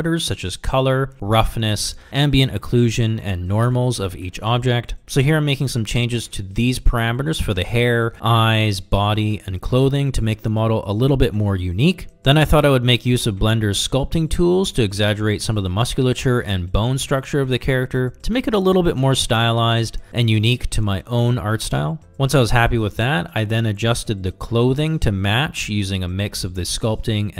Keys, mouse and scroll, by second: 8.0 click, 9.0 click, 9.5 middle click, 9.7 click, 10.0 middle drag, 10.7-11.8 drag, 11.8 click, 12.5 click, 13.1 click, 13.5 ctrl+z, 13.6 click, 14.2 click, 14.5 middle click, 14.8 click, 15.1 click, 15.3 click, 15.5 click, 15.6 middle click, 15.8 click, 16.1 d, 16.2 d, 16.4 f, 16.6 click, 16.7 click, 16.9 click, 17.5 s, 19.8 f, 19.9 click, 20.2 click, 20.6 click, 20.7 click, 20.8 f, 21.0 click, 21.4 click, 21.7 click, 22.0 click, 22.5-24.0 middle drag, 24.0 Tab, 24.0 a, 24.1 s, 25.5 f, 25.5 g, 25.7 click, 25.8 click, 26.2 click, 26.3 click, 26.5 click, 26.8 click, 27.0 middle click, 27.2 click.